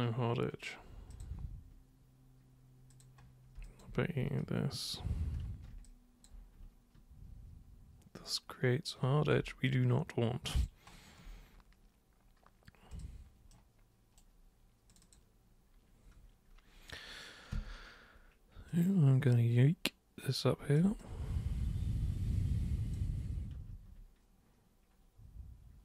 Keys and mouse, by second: 1.1 super+click, 2.9 super+click, 3.6 alt+super+click, 5.8 alt+super+click, 9.6-10.6 alt+super+drag, 12.9 super+click, 13.5 super+right click, 14.9 super+click, 17.5 super+w, 18.7-20.8 super+drag, 21.0-22.9 alt+super+drag, 23.6 ctrl+super+z.